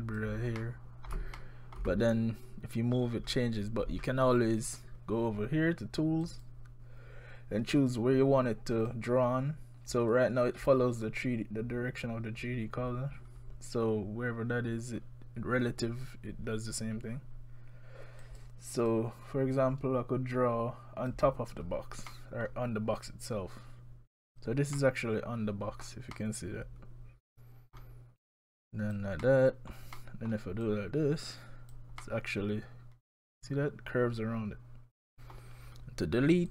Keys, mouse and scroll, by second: 0.6 scroll up 1, 0.6 middle click, 1.4 shift+middle click, 6.2 click, 8.7 click, 18.2 click, 18.7 click, 19.6 click, 22.1 middle click, 23.0 click, 24.8 middle click, 26.1 middle click, 28.2 click, 29.2 middle click, 30.0 middle click, 30.6 click, 32.0 middle click, 35.6 scroll down 1.